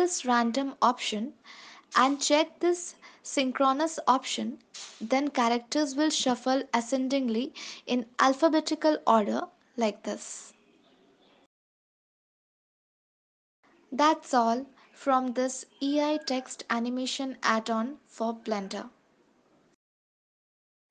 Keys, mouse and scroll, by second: 1.1 ctrl+s, 3.5 click, 4.8 ctrl+s, 4.9 space, 12.1 space, 13.2 click, 15.2 space.